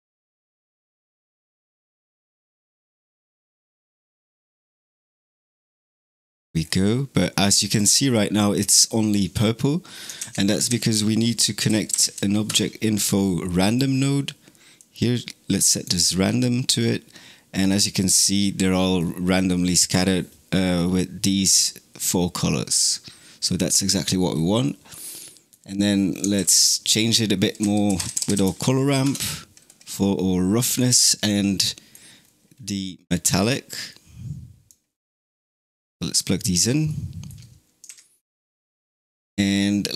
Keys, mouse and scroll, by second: 2.6 click, 3.7 click, 6.4 scroll down 4, 7.3-9.0 scroll down 1, 10.0 shift+a, 14.6 click, 17.1-17.4 scroll down 1, 17.4-17.8 scroll up 7, 18.2-18.9 scroll down 8, 22.6 click, 24.2-24.5 scroll down 3, 24.5-26.2 middle drag, 26.2 shift+a, 31.5-32.1 middle drag, 32.1-33.3 scroll up 2, 33.3 click, 35.2 click, 36.7 middle click, 37.7 shift+a.